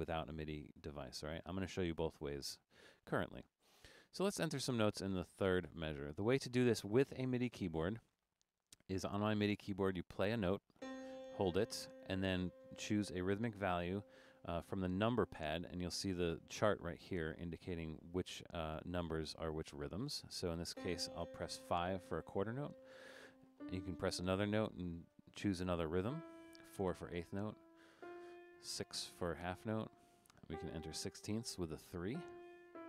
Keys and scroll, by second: 22.1 5, 25.3 4, 29.5 6, 31.9-32.8 typing.